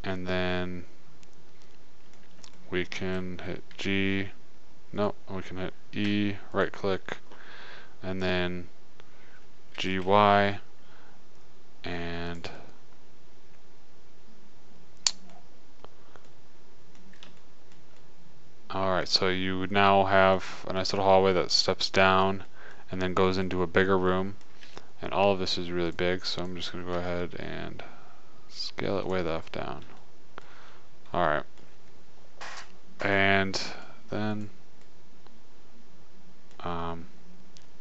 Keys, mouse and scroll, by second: 0.1-2.1 middle drag, 2.9-4.8 middle drag, 4.0 g, 6.5 e, 10.3 g, 12.6-14.4 drag, 14.5 middle click, 16.0-17.7 middle drag, 20.5 middle click, 22.5-24.0 middle drag, 25.0 a, 27.4 s, 29.7 middle click, 34.7-36.5 middle drag, 37.1-37.8 middle drag.